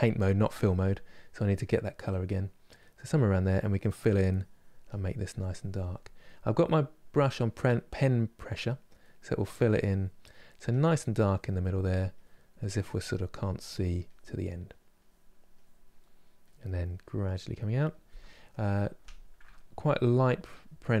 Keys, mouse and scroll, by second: 2.5 middle click, 3.1-7.5 drag, 7.5 middle click, 8.1 click, 8.7 middle click, 9.2 click, 10.0 middle click, 10.4 click, 11.3 middle click, 11.9-13.1 drag, 13.1 middle click, 13.8 click, 14.2 middle click, 14.7-15.7 drag, 15.7 middle click, 16.1 click, 16.7-21.0 middle drag.